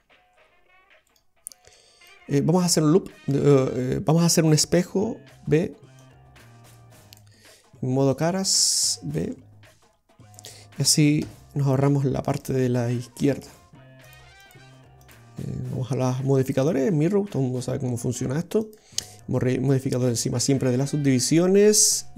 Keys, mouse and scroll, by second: 1.1 right click, 3.4 scroll down 1, 5.3 b, 8.2 click, 9.4 b, 11.3 x, 14.1 click, 14.5 click, 15.1 click, 18.7 click, 21.8 click.